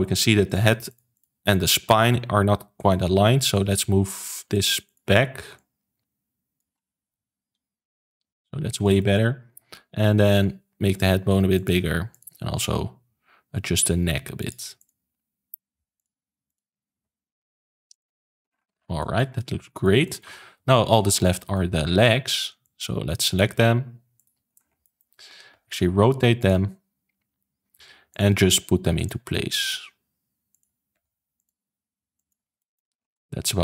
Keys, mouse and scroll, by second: 0.4 click, 0.8 shift+click, 1.1 shift+click, 1.8-3.4 shift+middle drag, 3.4 click, 4.2 ctrl+z, 4.8 shift+click, 5.5 click, 7.0 KP_3, 7.9 click, 8.7 click, 8.9 shift+middle click, 9.4-10.2 scroll up 1, 10.2 click, 10.7 g, 12.0 click, 12.2 g, 14.7 click, 14.9 g, 16.4 click, 16.8 g, 18.1 click, 18.4 scroll down 3, 18.7 ctrl+s, 18.9-20.6 shift+middle drag, 20.6 KP_1, 21.1-21.4 scroll up 2, 21.4-22.5 shift+middle drag, 22.5 click, 24.1 shift+click, 24.5 scroll down 2, 24.7 shift+middle click, 25.4 r, 26.5 g, 28.5 r, 29.1 g, 30.8 r, 31.5 g, 32.5 shift+middle click, 32.9 scroll up 3, 33.1-33.6 middle drag.